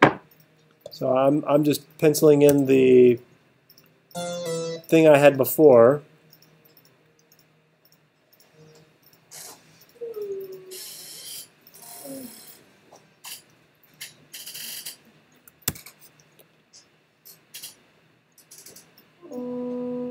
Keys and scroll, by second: 2.5 t, 15.7 t.